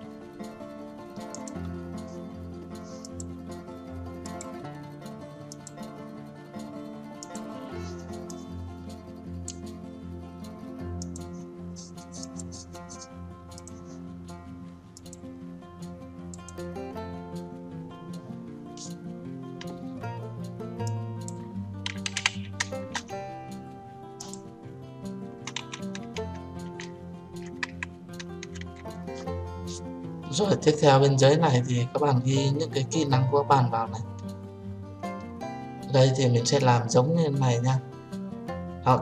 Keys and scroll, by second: 23.1 Return.